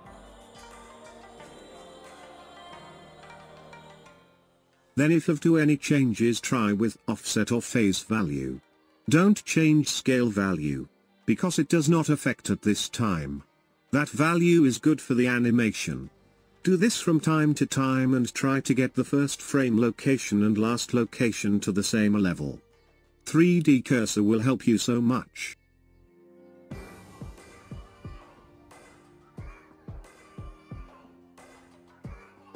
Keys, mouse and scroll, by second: 1.1 click, 7.3-23.9 drag, 31.9-32.5 drag.